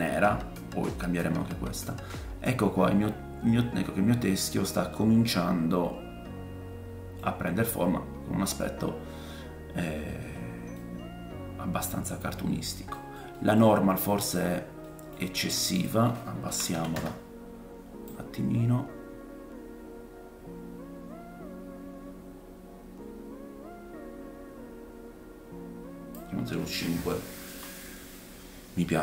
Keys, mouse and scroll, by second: 1.7 middle click, 4.2 middle click, 4.5 scroll up 2, 4.9-21.1 drag, 7.4 scroll down 2, 8.1 scroll up 1, 10.7 middle click, 12.5 scroll down 2, 13.0 middle click, 13.3 middle click, 13.8 scroll up 2, 14.8 middle click, 27.0-27.5 scroll down 2, 27.5 middle click.